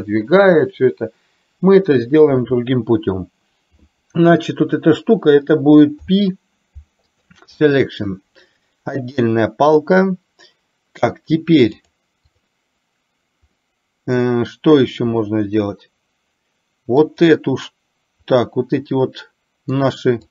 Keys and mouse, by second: 11.9-12.6 drag, 13.8-14.6 middle drag, 17.1 click, 18.5-19.9 middle drag.